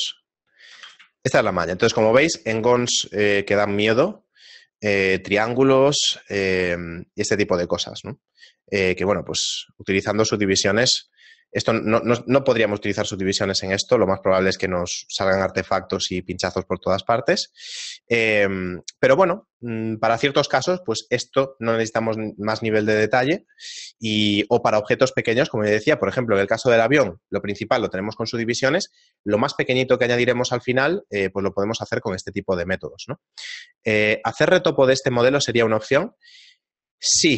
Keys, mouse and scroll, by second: 1.0 a, 1.3 shift+middle click, 10.6 right click, 10.6 a, 11.2 shift+middle click, 13.4 ctrl+middle click, 15.2 shift+middle click, 18.2 middle click, 19.2 middle click.